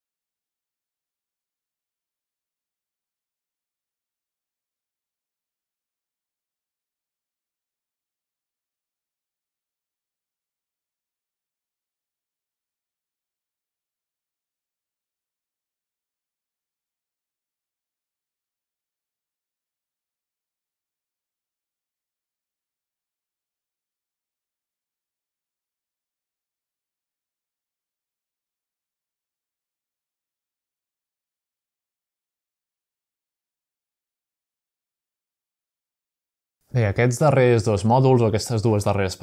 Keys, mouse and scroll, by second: 1.7 click, 2.7 g, 3.4 click, 4.4-5.7 scroll down 1, 5.7 click, 6.7 click, 9.1 click, 10.1 click, 11.0-12.4 drag, 12.6-14.4 drag, 13.5-14.4 scroll down 1, 14.4 scroll up 1, 14.6-15.0 shift+middle drag, 14.6 shift+scroll down 1, 15.6-16.8 middle drag, 16.2-17.4 drag, 17.8-21.9 drag, 21.7-22.7 scroll up 1, 22.2-23.1 middle drag, 22.2-22.9 typing, 24.2-24.6 shift+scroll down 1, 24.3 shift+middle click, 24.6-25.4 typing, 24.8-25.2 scroll up 1, 26.9 typing, 28.4-29.8 drag, 29.0-29.8 scroll down 1, 29.8-30.8 middle drag, 30.0-30.8 scroll up 1, 30.8-31.9 drag.